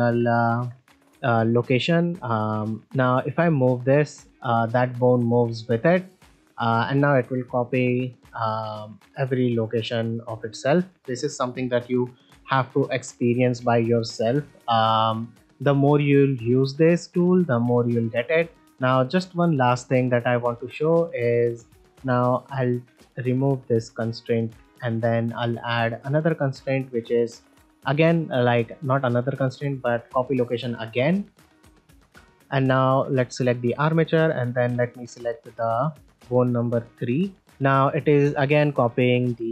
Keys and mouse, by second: 0.4 shift+middle drag, 1.5 shift+middle click, 3.2-3.5 middle drag, 4.0 click, 6.0-6.3 drag, 6.4-6.7 middle drag, 7.7 r, 8.4 right click, 8.7 g, 10.1 middle click, 10.6 click, 13.8-14.1 middle drag, 15.9-17.4 drag, 20.4 ctrl+middle click, 20.7 middle drag, 21.7 shift+middle click, 24.1 click, 24.9 middle drag, 26.0-29.6 drag, 30.8 middle drag, 32.3 click, 34.4-37.4 drag, 37.4 middle click.